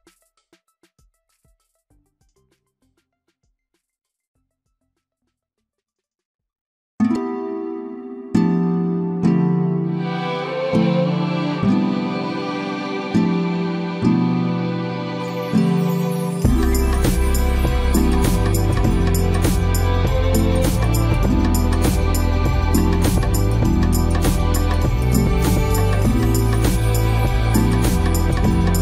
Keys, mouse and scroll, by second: 5.5 alt+t, 25.2 Escape.